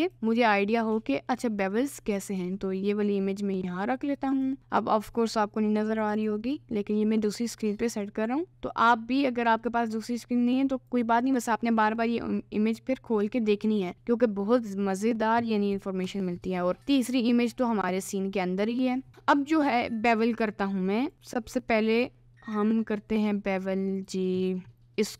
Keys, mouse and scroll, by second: 17.2 middle click, 19.7-21.1 middle drag, 21.1 click, 21.7 middle click.